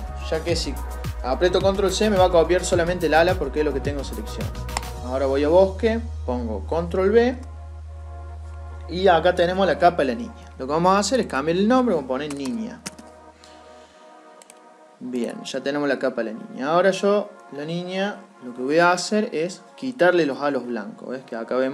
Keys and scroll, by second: 6.5 ctrl+v.